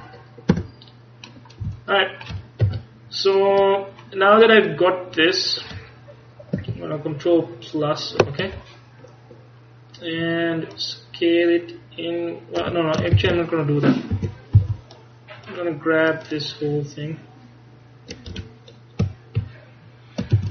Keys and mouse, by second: 0.6 Tab, 1.7 z, 2.7 KP_1, 5.4-6.8 middle drag, 6.8-8.4 ctrl+KP_Add, 10.8 click, 13.2 ctrl+z, 14.2 a, 14.6 c, 18.7-20.5 middle drag, 20.4 z.